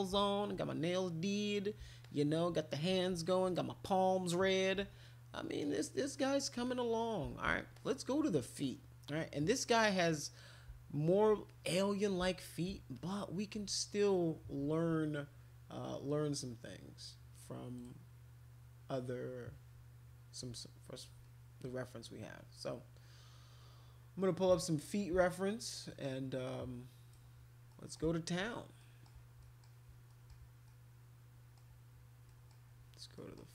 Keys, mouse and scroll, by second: 0.9 click, 2.0 alt+click, 4.7 alt+click, 5.6 alt+click, 6.2 alt+click, 6.7 click, 7.8 alt+click, 10.0 click, 11.4 click, 12.9 alt+click, 17.8 right click, 25.9-27.1 right drag, 27.7 middle click, 28.8 middle click, 29.4 middle click, 30.1 middle click, 30.7 middle click, 32.2 middle click, 33.1 middle click.